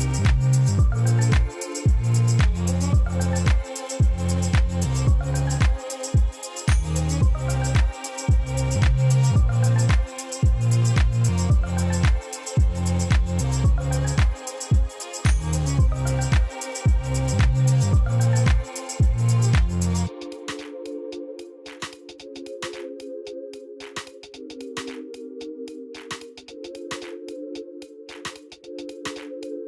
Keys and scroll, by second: 0.0 ., 0.1 1, 0.5 Return, 0.8 ctrl++, 1.1 p, 3.9 a, 3.9 j, 4.0 a, 4.4 Return, 5.7 e, 5.9 ., 6.0 1, 6.2 Return, 6.8 p, 8.9-9.3 typing, 9.5 Return, 10.6 e, 10.8 ., 11.0 1, 11.1 Return, 11.8 p, 13.0-13.6 typing, 14.3 Return, 16.3 Tab, 18.4 alt+a, 23.5 Right, 23.7 ctrl+shift+Left, 24.1-24.7 typing.